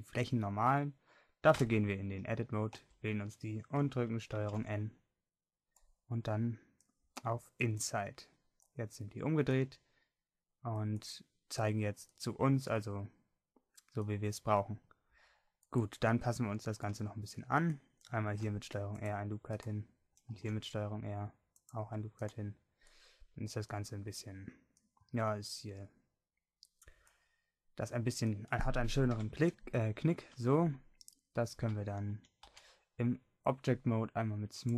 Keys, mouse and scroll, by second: 1.6 Tab, 2.8 a, 4.4 ctrl+n, 18.3 ctrl+r, 20.4 ctrl+r, 29.2 KP_1, 32.2 a, 32.5 Tab.